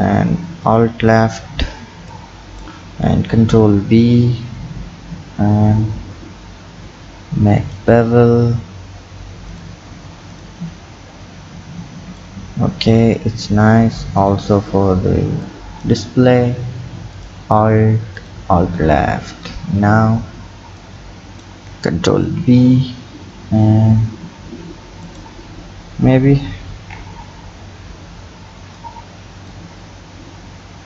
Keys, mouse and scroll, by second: 0.7 alt+shift+click, 2.1 click, 3.3 ctrl+b, 9.5 click, 9.9 Tab, 10.3 click, 10.6-12.2 scroll down 3, 12.2 click, 14.2 click, 15.4 click, 16.0 Tab, 17.2 alt+click, 18.1 alt+shift+click, 19.5-20.8 scroll up 3, 20.8-22.2 drag, 22.2 ctrl+b, 26.7 ctrl+KP_3, 27.5-28.8 scroll up 5, 28.8 click, 29.8-30.3 scroll up 11.